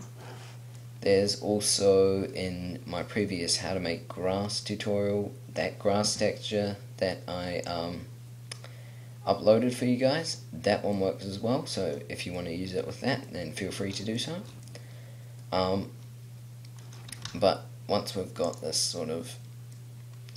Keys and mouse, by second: 1.5 middle click, 7.8-10.2 drag, 10.6 middle click, 17.2 r, 18.9-20.3 middle drag.